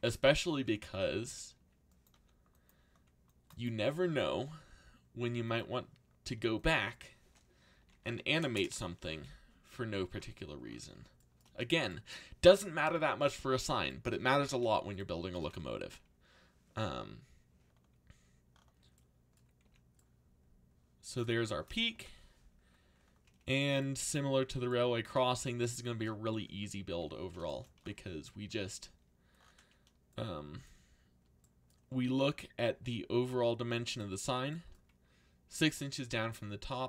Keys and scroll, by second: 0.9 z, 2.1 c, 3.6-4.5 typing, 7.5-9.9 typing, 15.8 a, 19.6 z, 26.8 z.